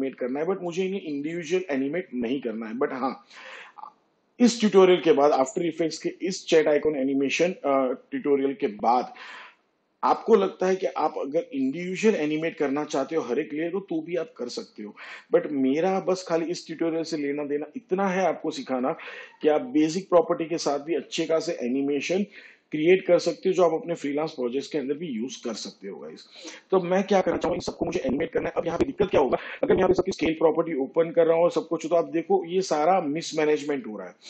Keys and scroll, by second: 30.7 s.